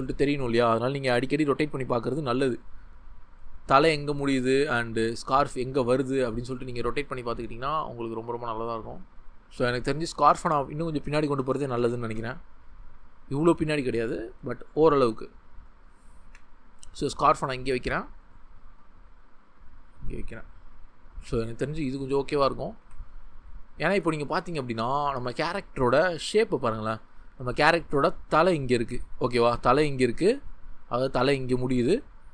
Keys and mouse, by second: 0.0 middle click, 3.5 click, 5.1 middle click, 10.8-12.6 ctrl+z, 15.7 click, 16.3 g, 17.7 click, 18.6 g, 21.7 g, 22.2 click, 22.8 Tab, 30.2 ctrl+z.